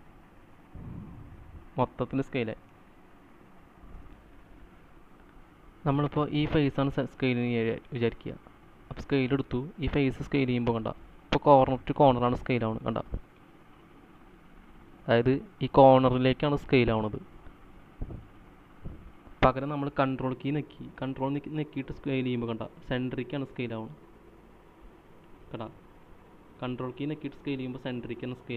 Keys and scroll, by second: 4.9 space, 4.9 c.